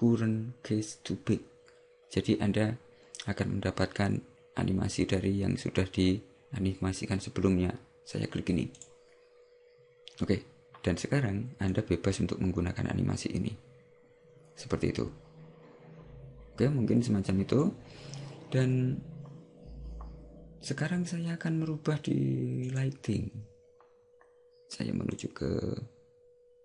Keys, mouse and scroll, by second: 8.8 click, 22.8 right click, 25.2 right click.